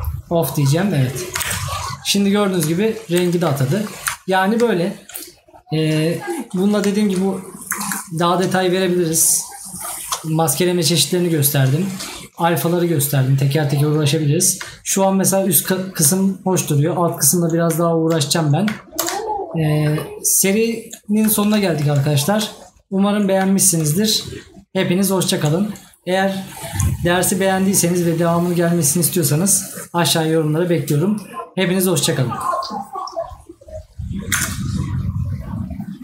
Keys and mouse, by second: 2.8 right click, 4.7 right click, 6.4 right click, 14.1 right click, 16.6 right click.